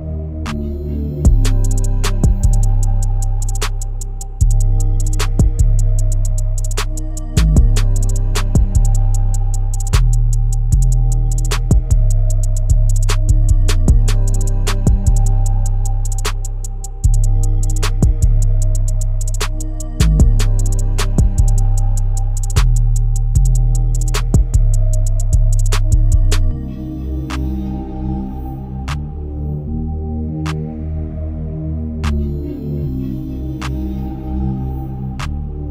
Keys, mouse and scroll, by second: 0.0-3.9 drag, 4.9-11.3 shift+drag, 11.3-12.4 scroll up 1, 12.4-19.4 drag, 22.1-35.7 drag.